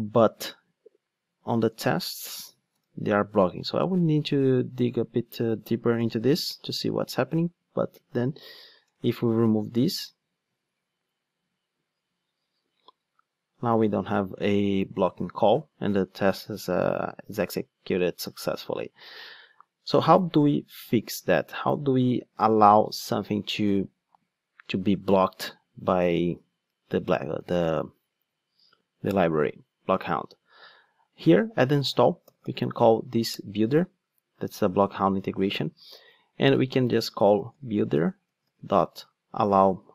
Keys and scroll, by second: 2.7 super+/, 9.8 ctrl+shift+d, 18.6 super+z, 33.3 Return.